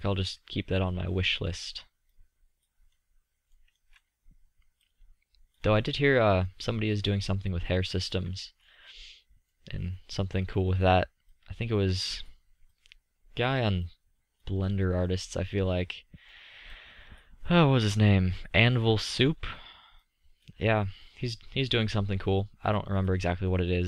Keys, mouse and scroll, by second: 1.3 middle click, 2.1 middle click, 3.3-3.6 middle drag, 3.6 click, 3.8 middle drag, 4.3-8.1 middle drag, 10.0-11.2 middle drag, 11.3 middle click, 11.5-15.4 drag, 15.4-16.1 middle drag, 20.2-20.7 middle drag, 21.1-22.0 middle drag.